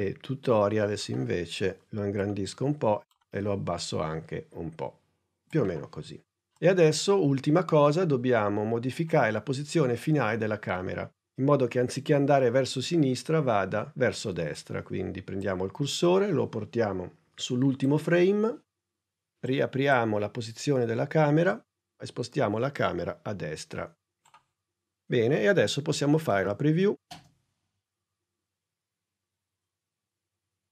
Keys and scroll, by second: 19.9 p, 27.0 space.